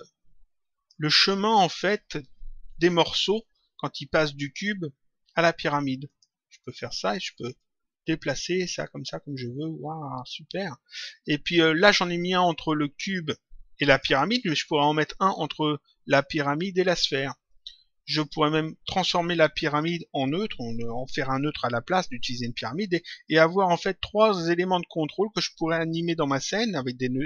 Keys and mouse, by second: 2.6 click, 6.0 click, 7.5 click, 13.8 click, 17.4 click.